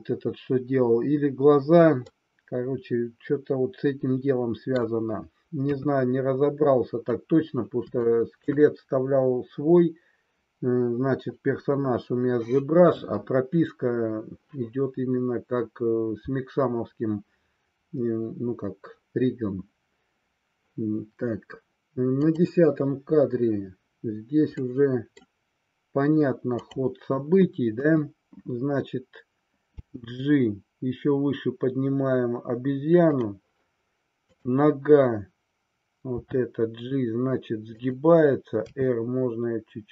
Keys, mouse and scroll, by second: 2.0-4.6 middle drag, 4.8 middle click, 5.7 KP_3, 8.0-8.4 shift+middle drag, 22.1 click, 24.6-25.3 middle drag, 27.9 KP_3, 29.9 g, 33.1 click, 34.3-35.5 drag, 36.2 g, 37.8 click, 38.7 r.